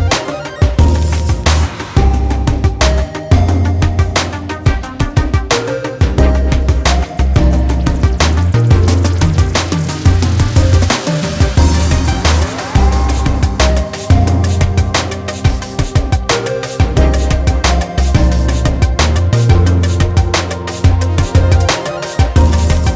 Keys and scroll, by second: 9.0 ctrl+z, 11.3-12.1 ctrl+z.